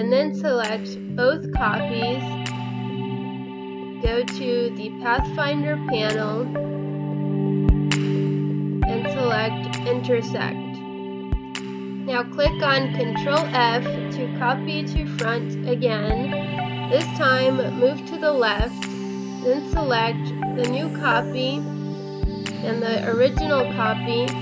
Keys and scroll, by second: 1.4 Right, 6.7 Right, 12.0 ctrl+f, 13.5 Left, 15.7 ctrl+z, 19.4 Delete, 21.9 ctrl+f, 22.2 Right.